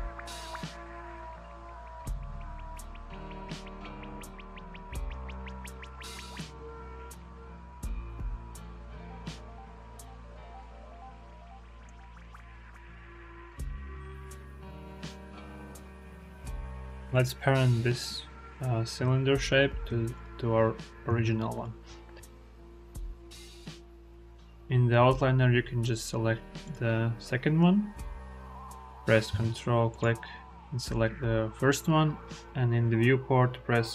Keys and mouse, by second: 1.4 click, 2.5 Tab, 2.7-3.2 drag, 4.7 drag, 5.2 ctrl+z, 5.5 ctrl+z, 6.2 s, 7.3 Tab, 7.5-7.9 drag, 11.8 click, 13.2-14.3 drag, 14.8 click, 16.6 click, 21.4 ctrl+click, 24.3 click, 29.8 ctrl+click.